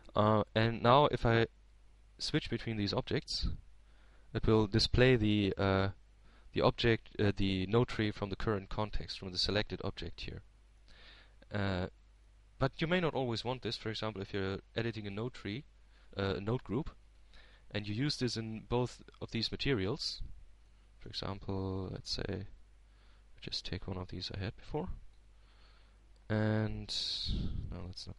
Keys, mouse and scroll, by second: 0.4-3.0 drag, 5.0 right click, 6.0 right click, 7.0 right click, 13.0 right click, 14.4 right click, 15.8 right click, 24.3 middle click, 25.3 shift+a, 27.7 click.